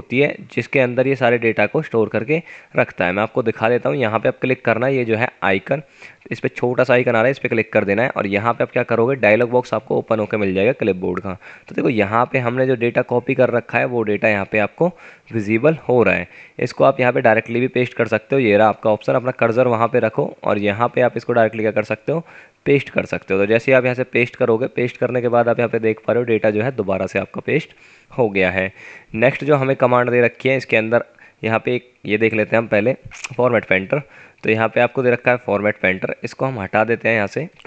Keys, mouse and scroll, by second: 17.0 F9, 24.9 F9, 25.3 typing, 33.3 F9.